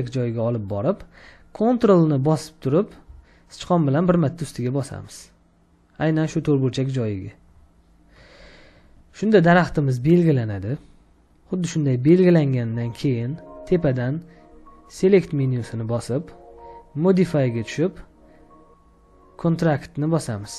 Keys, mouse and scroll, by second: 7.4 ctrl+click, 11.1 ctrl+click.